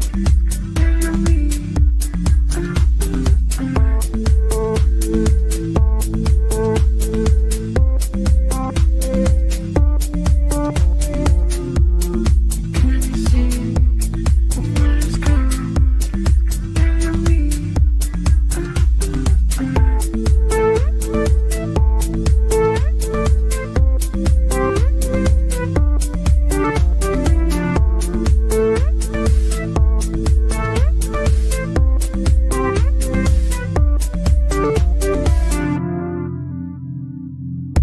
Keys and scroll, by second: 35.1 ctrl+z.